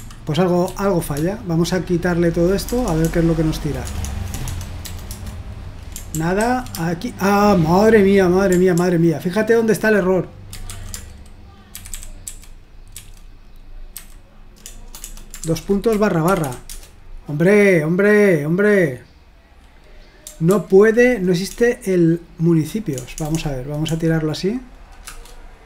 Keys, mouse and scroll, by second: 0.7 ctrl+p, 1.2-4.8 typing, 5.1 Return, 6.2 ctrl+p, 6.4 ctrl+a, 8.8 ctrl+p, 10.6 ctrl+a, 11.8 alt+f, 11.9 alt+f, 12.3 alt+f, 13.0 alt+f, 13.9 alt+b, 14.6-16.4 typing, 16.7 Return, 20.5 ctrl+p, 21.6-23.9 typing, 25.1 Return.